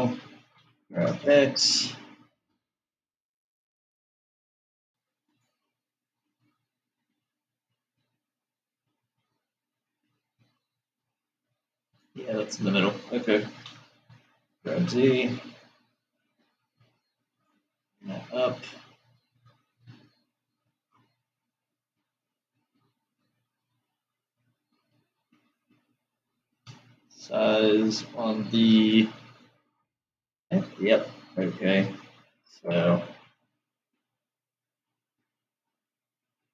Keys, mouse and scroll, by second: 0.8 g, 5.7 click, 7.3-10.5 middle drag, 12.1 click, 13.8 g, 18.4-21.6 middle drag.